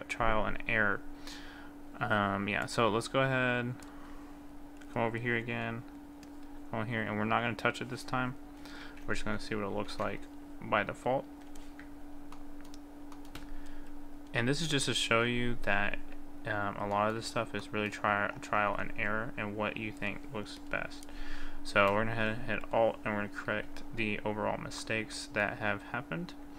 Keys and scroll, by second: 9.9 ctrl+z.